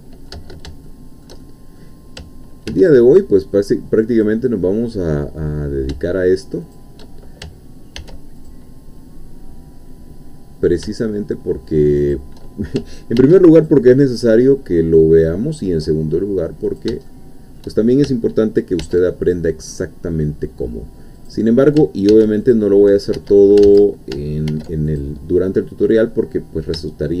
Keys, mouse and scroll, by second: 0.9-1.9 shift+middle drag, 2.7 ctrl+r, 4.2 click, 6.6 shift+click, 8.0 ctrl+r, 8.5 ctrl+click, 12.0 shift+click, 13.2 ctrl+r, 13.6 ctrl+click, 16.7 shift+click, 17.1 shift+middle click, 18.8 ctrl+r, 19.2 ctrl+click, 21.2 click, 22.1 ctrl+r, 22.5 ctrl+click, 23.2 Escape, 23.7 ctrl+z, 24.5 ctrl+r, 24.9 ctrl+click.